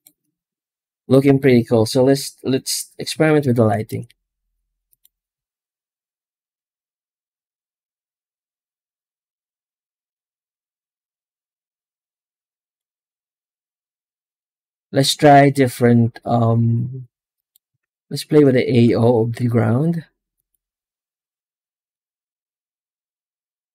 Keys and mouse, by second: 3.2 ctrl+s, 3.7 z, 6.4-12.5 drag, 13.6 z, 17.2 right click, 17.7 alt+shift+z, 18.1 alt+shift+z, 18.5 alt+shift+z, 19.1 z, 21.8-23.7 middle drag.